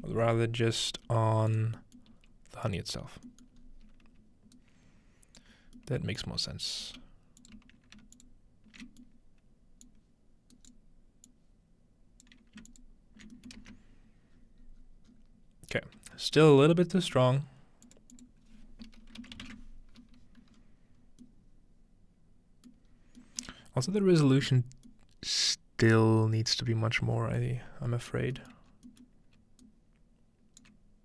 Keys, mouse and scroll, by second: 0.0-1.1 alt+drag, 0.0 typing, 1.1 g, 1.5-2.7 drag, 1.7-3.0 scroll down 1, 2.1 typing, 2.8 click, 3.0-5.1 scroll up 1, 4.6-5.6 alt+right drag, 5.1-5.4 alt+scroll up 1, 5.7-6.8 scroll down 1, 6.2-6.8 drag, 6.8 g, 7.4 click, 8.2-8.8 alt+shift+drag, 9.0 click, 9.9 alt+shift+click, 11.3-14.4 drag, 13.6 ctrl+space, 14.4-15.1 scroll down 1, 15.1 scroll up 1, 16.2-17.9 scroll up 3, 17.9-19.4 drag, 20.6-22.7 scroll up 1, 21.2-23.4 middle drag, 22.9-23.6 scroll down 1, 23.5-23.9 middle drag, 23.6 scroll up 1, 27.6 middle click, 27.7-28.7 scroll down 2, 28.7-29.4 scroll up 2, 29.6-30.0 alt+right drag, 30.0-31.0 alt+middle drag, 30.0 scroll up 1.